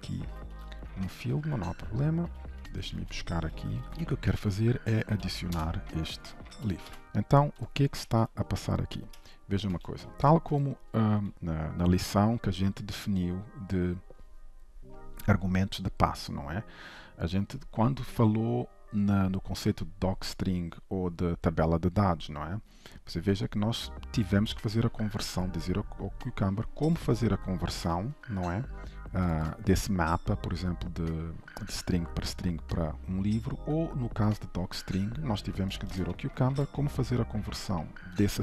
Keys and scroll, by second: 1.4 ctrl+w, 2.9 ctrl+c, 5.5 Return, 7.0 ctrl+s, 9.1 ctrl+shift+KP_Subtract, 9.9 ctrl+s, 36.0 ctrl+shift+KP_Add.